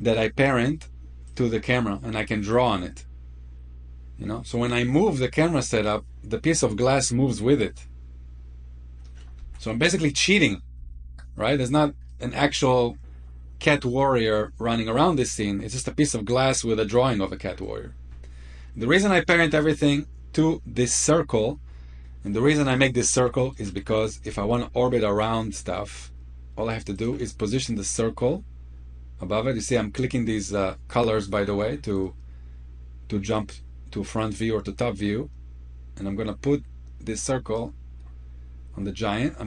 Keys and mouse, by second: 1.2 click, 3.6-4.1 drag, 5.9 click, 9.5 ctrl+z, 10.8 ctrl+z, 12.0-13.9 middle drag, 15.3-15.7 middle drag, 16.8-17.5 middle drag, 22.3-23.4 shift+middle drag, 24.1 g, 26.8-27.2 drag, 33.3 click, 34.8 click, 39.3-39.4 middle drag.